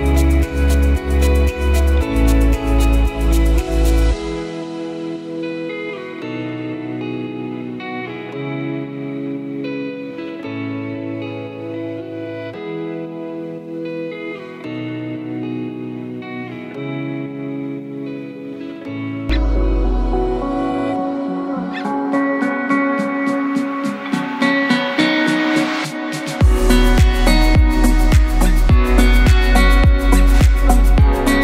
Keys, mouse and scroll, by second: 4.0 shift+a, 6.3 click, 9.1 ctrl+alt+n, 13.4 click, 14.4-15.1 scroll up 1, 15.7 click, 19.6 click, 21.6 click, 25.9 click, 30.4 click.